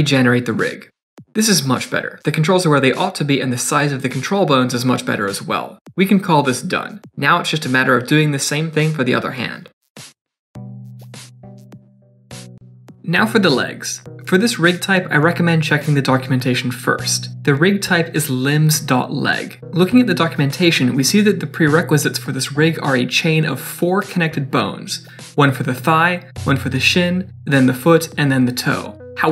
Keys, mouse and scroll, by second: 0.1 g, 0.1 middle click, 0.5 click, 0.5 middle click, 0.6 middle click, 0.6 ctrl+z, 0.7 Tab, 0.7 middle click, 0.7-1.1 click, 0.8 click, 0.8 click, 1.1 middle click, 1.2 middle click, 1.2 Tab, 1.2 click, 1.3 shift+click, 1.4 middle click, 1.5 g, 2.0 click, 2.1 middle click, 2.3 click, 2.6 click, 3.1 click, 3.4 click, 3.5 middle click, 3.6 g, 4.2 middle click, 4.4 click, 4.5 g, 4.8 middle click, 4.9 g, 5.4 middle click, 5.7 shift+middle click, 5.7 scroll up 3, 5.8 middle click, 5.9 Tab, 6.0 middle click, 6.1 shift+middle click, 6.1 click, 6.2 click, 6.3 click, 6.3 click, 6.4 shift+middle click, 6.5-7.1 click, 6.5 click, 6.6 click, 6.7 click, 7.1 middle click, 7.6 shift+middle click, 7.7 scroll up 2, 7.8 middle click, 8.0 shift+middle click, 8.1 middle click, 8.4 scroll down 1, 8.4 shift+middle click, 8.5 shift+middle click, 8.5 click, 8.6 Tab, 8.7 click, 8.7 click, 8.8 BackSpace, 8.9 BackSpace, 9.2 Down, 9.2 Down, 9.3-9.9 click, 9.5 click, 9.6 click, 9.9 middle click, 10.0 click, 10.0 shift+middle click, 10.1 click, 10.3 click, 10.3 scroll down 1, 10.4 middle click, 10.5 click, 10.5 shift+middle click, 10.6 click, 10.6 shift+click, 10.8 shift+click, 10.8 shift+middle click, 10.9 Tab, 10.9 click, 11.0 click, 11.1 middle click, 11.1 scroll down 1, 11.2 click, 11.2-12.6 typing, 11.4 click, 11.4 click, 11.6 click, 11.9 click, 12.1 click, 12.1 click, 12.3 click, 12.4 click, 12.6 click.